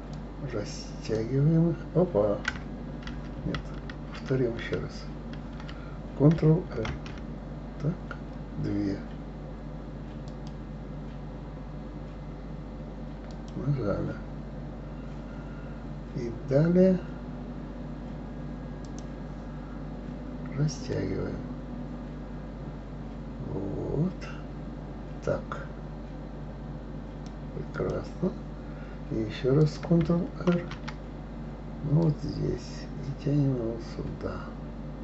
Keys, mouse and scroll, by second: 0.1 click, 3.1 ctrl+z, 3.3 ctrl+z, 4.0 ctrl+z, 4.3 ctrl+z, 4.8 ctrl+z, 6.9 ctrl+r, 18.8 click, 20.9-23.9 drag, 27.7 click, 29.6 click, 30.5 ctrl+r.